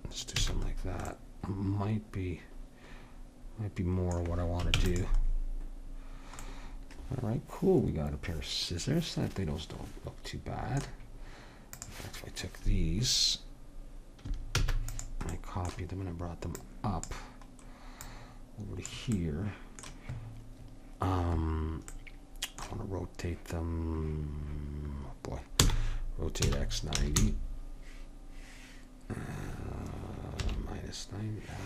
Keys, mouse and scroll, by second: 0.4 a, 4.8 ctrl+s, 11.8-13.6 drag, 14.6 shift+d, 16.5-17.8 drag, 18.1-19.9 drag, 25.6 r.